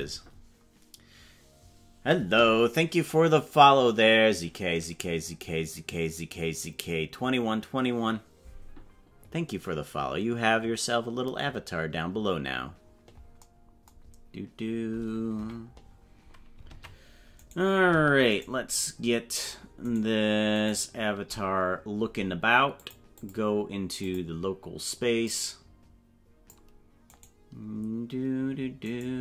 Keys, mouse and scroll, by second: 11.6 scroll down 10, 15.3 KP_Decimal, 16.7 ctrl+Tab, 17.8 right click, 18.7 shift+right click, 20.3 shift+right click, 22.7 click, 23.2-24.2 drag, 25.2-26.6 drag, 27.5 right click.